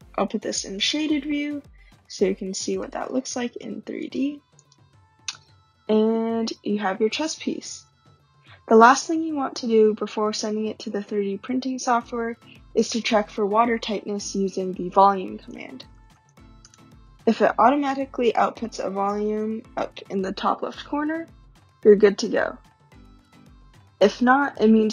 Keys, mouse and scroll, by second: 0.8 click, 2.8 right click, 4.0 click, 4.6 click, 15.2-16.7 typing.